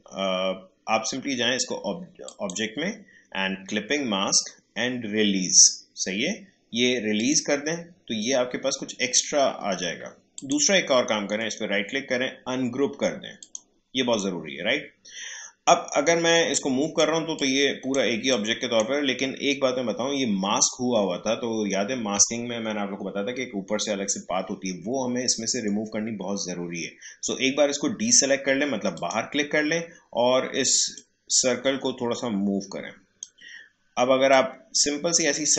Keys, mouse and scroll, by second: 2.2 click, 7.1 click, 10.3 click, 11.4 right click, 13.4 click, 16.7-21.2 drag, 28.9-35.5 drag.